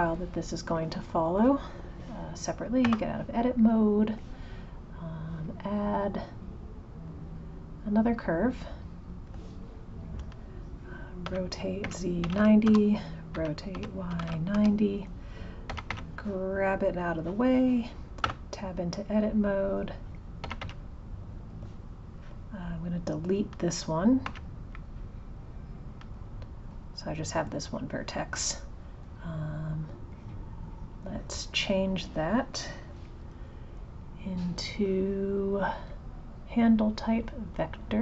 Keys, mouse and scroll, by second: 1.4 click, 3.5 click, 4.5 alt+F14, 4.6 click, 5.4-8.6 drag, 9.4 alt+F13, 11.2 r, 19.4 click, 22.2 click, 27.2 click, 30.1 click, 34.4-37.4 right drag.